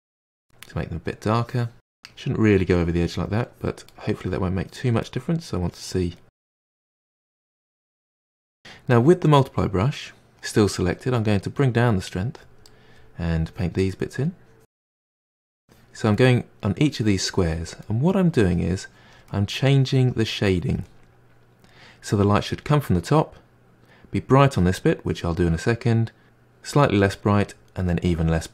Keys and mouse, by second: 0.2-0.5 middle drag, 0.5 drag, 0.8 middle drag, 1.1 click, 1.3-3.5 middle drag, 3.5-3.9 drag, 3.9-4.6 middle drag, 4.6-5.0 drag, 5.0-5.7 middle drag, 5.7-6.2 drag, 6.2 middle click, 6.4 click, 6.5 middle click, 6.7 click, 6.9-7.2 middle drag, 7.2 drag, 7.4 middle click, 7.6 drag, 7.7-10.9 middle drag, 10.9-12.7 drag, 12.7 middle click, 13.4 click, 13.9 middle click, 14.5 click, 15.2 middle click, 15.6 click, 16.1 middle click, 16.9 click, 17.8 middle click, 18.3-19.3 drag, 19.3 middle click, 19.8-20.8 drag, 20.8-23.9 middle drag, 24.9-28.5 middle drag.